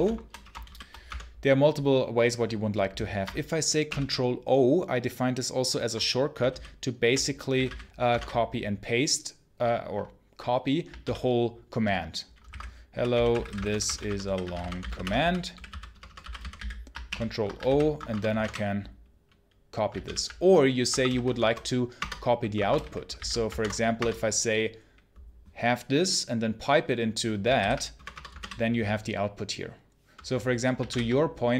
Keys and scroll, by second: 0.0-0.9 typing, 3.7 ctrl+o, 6.4 super+h, 7.2-8.5 typing, 10.9 super+l, 12.1-16.9 typing, 17.0 ctrl+o, 17.5 super+h, 17.8 Escape, 18.0 Return, 18.2 space, 18.3 p, 19.9 super+l, 20.8 Escape, 21.0 shift+a, 21.1 shift+space, 21.9 Return, 22.3-23.5 typing, 23.9 Return, 27.5 super+h, 27.8 Return, 28.2 space, 28.3 p, 30.8 super+l.